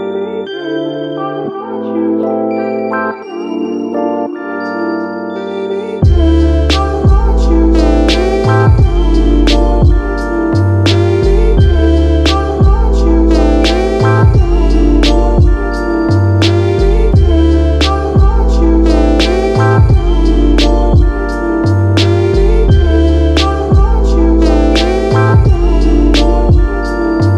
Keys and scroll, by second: 4.8 space, 25.1 super+z, 25.9 super+z.